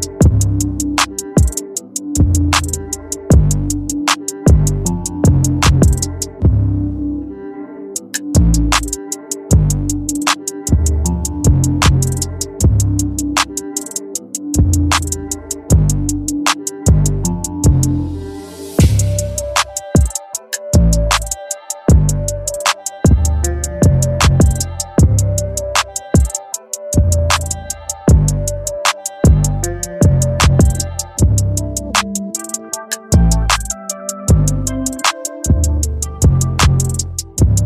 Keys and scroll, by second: 1.2 ctrl+t, 15.0 Return.